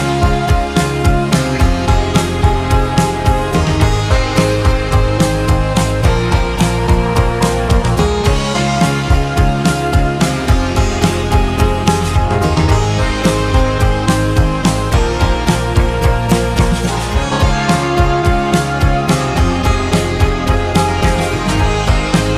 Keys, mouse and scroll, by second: 1.1-3.5 middle drag, 5.4 shift+middle click, 6.1-6.5 scroll down 1, 6.5 scroll up 1, 6.8 middle click, 7.7-9.1 scroll up 7, 9.1-10.3 scroll down 6, 10.3 click, 11.0-12.3 middle drag, 12.3 3, 12.7 click, 14.1-16.7 shift+middle drag, 16.7-17.0 scroll down 2, 20.3-22.3 scroll down 1.